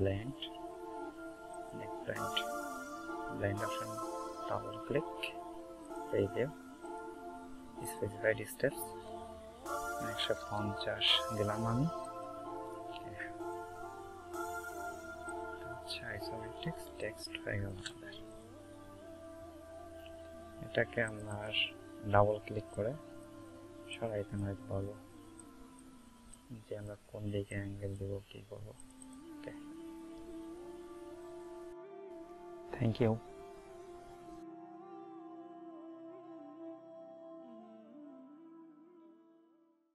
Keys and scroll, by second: 9.9 KP_1, 10.0 KP_5, 10.2 KP_0.